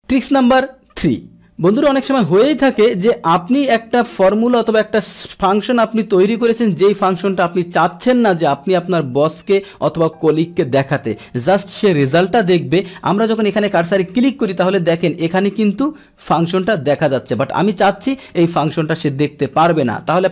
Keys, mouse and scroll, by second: 3.5-6.9 drag, 11.4-13.0 drag, 13.7 click.